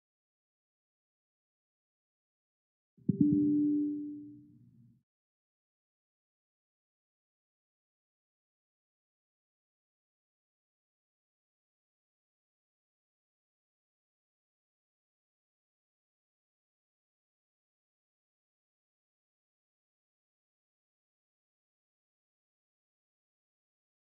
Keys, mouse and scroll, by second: 0.0-1.0 typing, 2.6 click, 7.4 click, 8.6 click, 12.0 super+r, 13.6 click, 15.1 click.